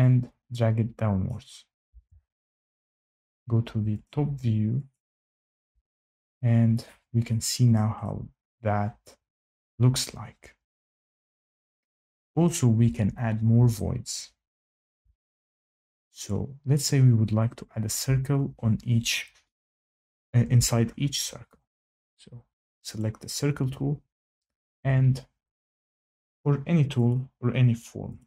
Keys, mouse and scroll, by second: 1.2 click, 2.9 click, 4.0 click, 4.9 click, 7.7 shift+middle click, 12.4 shift+middle click, 14.8 shift+middle click, 16.2 click, 20.8 click, 22.9 click, 23.4-23.8 scroll, 24.6 click, 25.6 click, 27.0 click, 28.1 click.